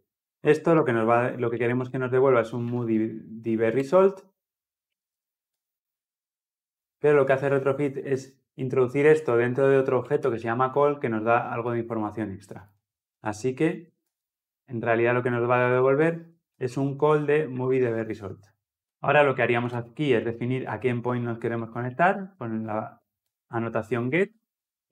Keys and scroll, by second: 3.6 Return, 13.9 alt+Return, 17.4 alt+Return, 17.5 ctrl+alt+l, 17.6 ctrl+alt+o, 23.1 Return.